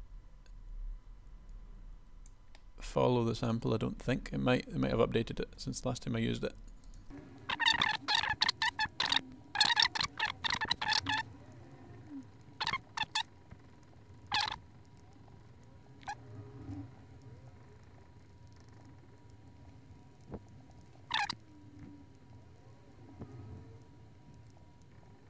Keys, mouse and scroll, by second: 8.7 click, 9.4 click, 11.3 click, 12.2 click, 12.5 click, 16.0 click, 18.9 click, 20.3 KP_1.